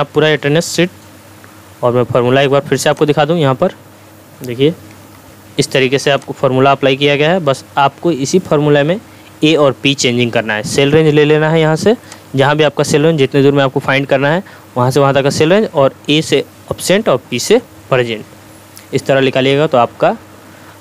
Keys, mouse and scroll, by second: 5.1 2, 6.2-7.1 ctrl+drag, 8.1 scroll up 1, 12.3-13.3 ctrl+drag.